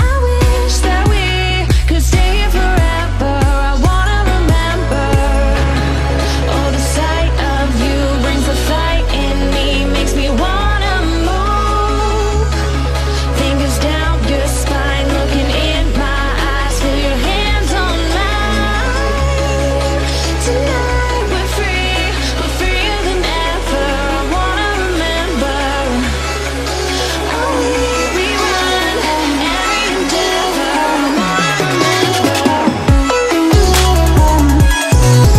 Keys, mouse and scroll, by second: 3.4-5.6 drag, 11.2-11.7 click, 13.4 Down, 14.3 Up, 16.7 click, 17.5 space, 17.7 click, 17.9-18.2 space, 18.6 click, 18.8 space, 19.5 click, 22.1-25.2 drag, 25.7 space, 25.9-26.3 click, 26.1 space, 26.8 ctrl+=, 27.6 space, 27.7-28.1 drag, 31.3 Left, 32.6 Up, 34.7 Down.